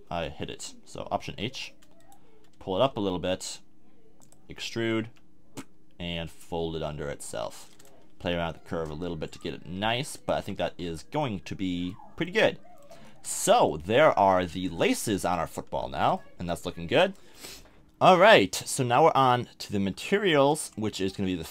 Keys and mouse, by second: 1.3 alt+h, 2.9 g, 5.0 e, 8.2 s, 9.7 r, 10.4 a, 10.5 Tab, 10.8 z, 11.2-12.2 middle drag.